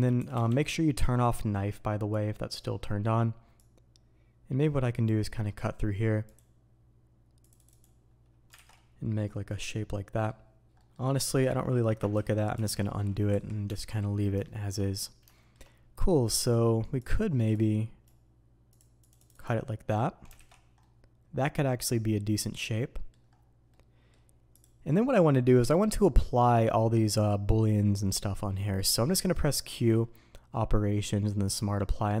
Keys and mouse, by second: 23.8-32.2 drag.